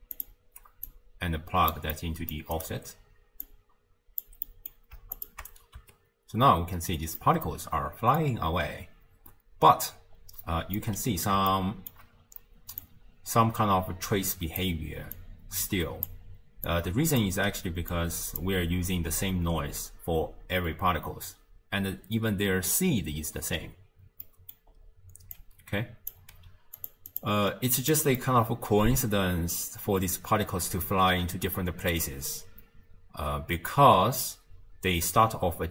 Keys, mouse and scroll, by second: 0.9 click, 3.5 drag, 4.5-5.2 middle drag, 5.2 ctrl+shift+click, 5.8 space, 6.5 scroll down 2, 7.3-8.5 middle drag, 8.5-9.6 scroll down 1, 9.6 space, 10.2-10.7 scroll up 1, 10.7 scroll up 1, 10.8-12.5 middle drag, 12.5 d, 12.8-14.6 drag, 14.6-15.1 d, 15.2 click, 16.1-16.5 d, 16.7-17.2 drag, 17.2 d, 17.3 d, 18.0 click, 24.3 middle click, 24.8-25.4 scroll down 4, 25.4 click, 26.4 g, 27.1 click, 27.4-31.4 scroll up 7, 27.9 middle click.